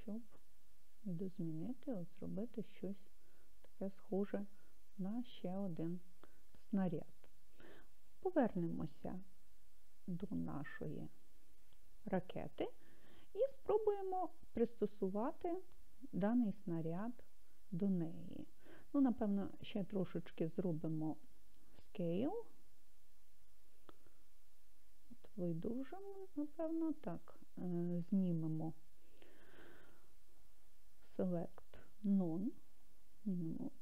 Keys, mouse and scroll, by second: 5.4 click, 10.5 KP_Divide, 23.5 s, 27.0 click, 31.2-32.4 drag.